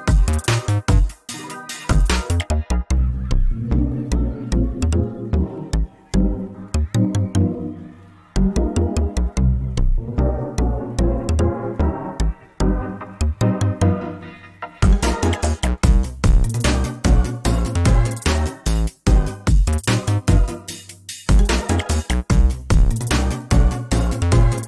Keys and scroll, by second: 5.2 ctrl+space, 9.7 ctrl+space, 10.6 ctrl+space, 20.3 ctrl+space, 21.9 ctrl+space, 22.7 ctrl+alt+space, 23.3 ctrl+z, 23.9 ctrl+space.